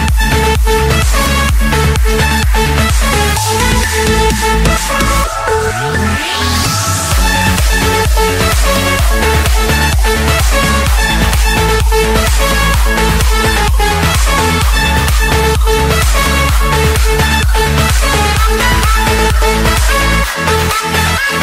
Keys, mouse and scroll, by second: 1.7-3.0 drag, 3.2-4.5 drag, 4.7 click, 5.8 click, 6.2-6.9 scroll, 7.9 click, 8.6 click, 9.6 click, 10.6 click, 12.8 click, 14.0 click, 14.9 click, 15.4-15.9 scroll, 17.2 click, 17.6-18.0 scroll down 4, 18.2 Escape, 20.0 click, 21.1 click.